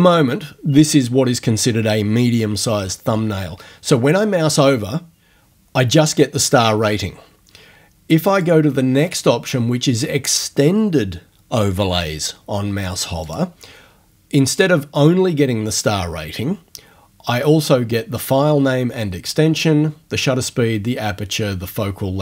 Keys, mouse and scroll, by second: 8.3 click, 13.2 click.